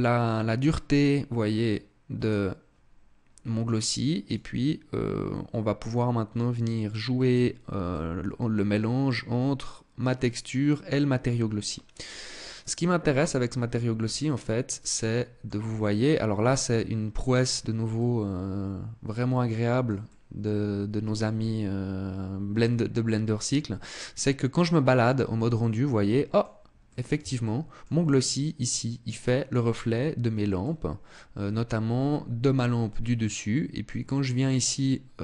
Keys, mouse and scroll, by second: 0.5 click, 3.9 click, 7.5 click, 11.6-12.7 scroll down 3, 12.7 right click, 13.6 scroll up 4, 14.5 middle click, 15.3-15.7 scroll up 2, 16.0 middle click, 17.1 scroll up 2, 17.5 middle click, 19.2 middle click, 19.6 middle click, 25.1 middle click, 26.4 middle click, 26.9 shift+middle click, 29.4-30.0 scroll down 2, 30.1 middle click.